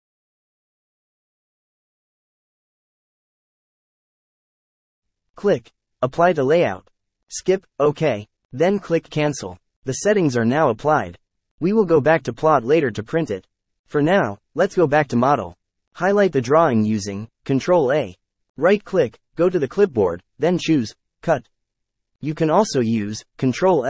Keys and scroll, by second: 16.8 ctrl+a.